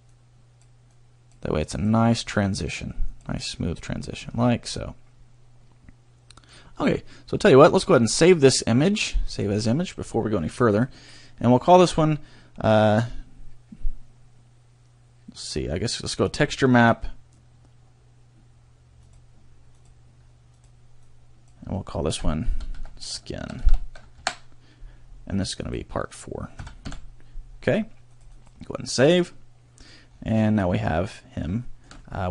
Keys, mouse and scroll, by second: 0.2 click, 1.0 click, 1.7 click, 2.5 click, 3.2 click, 3.6 scroll down 1, 4.2 middle click, 8.0 click, 29.4 click, 30.1 scroll down 1, 30.5 middle click, 31.6 shift+middle click, 32.0 middle click.